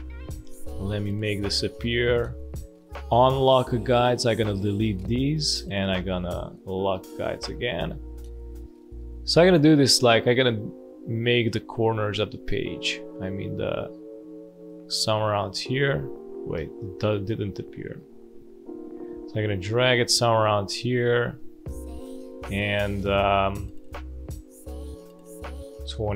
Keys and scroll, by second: 0.5 ctrl+:, 4.9 Delete, 7.1 space, 14.9 space, 16.5 space.